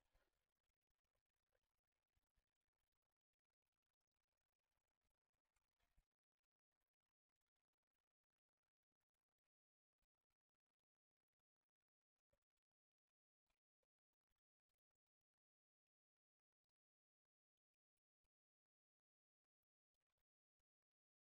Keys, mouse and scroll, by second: 3.5 alt+middle click, 5.5 alt+q, 6.2 click, 6.8 click, 7.8 alt+q, 8.2 scroll up 2, 8.3 scroll down 2, 8.4 alt+middle click, 10.5 click, 12.8 click, 13.2 ctrl+click, 13.6 alt+middle click, 14.2 ctrl+click, 14.6 ctrl+click, 14.8 ctrl+click, 15.2 ctrl+click, 15.6 ctrl+click, 16.0 ctrl+click, 16.3 ctrl+click, 16.6 ctrl+click, 16.9 ctrl+click, 17.3 ctrl+click, 17.6 ctrl+click, 18.0 ctrl+click, 18.3 click, 18.7 ctrl+z, 19.0 ctrl+click, 19.2 ctrl+click, 19.6 ctrl+click, 19.9 ctrl+click, 20.3 alt+middle click, 21.1 middle click.